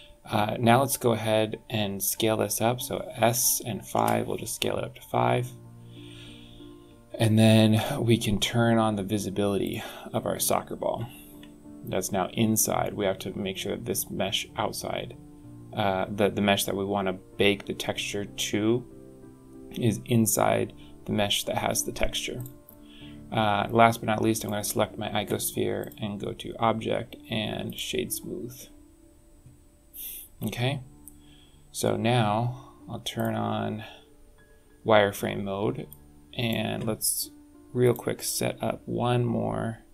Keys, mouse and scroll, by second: 0.7 scroll down 2, 0.9-1.2 scroll up 3, 3.1 s, 4.6-4.9 scroll down 6, 5.4 scroll up 1, 7.6 click, 9.5 click, 10.8-11.4 scroll up 10, 12.2 scroll down 3, 22.3 click, 24.3 click, 25.7 click, 29.9 scroll down 2, 30.2 scroll up 3, 31.7 scroll down 4, 33.1 click, 33.6-33.9 scroll down 2, 34.4-34.7 scroll up 2, 35.8 click, 37.7 click.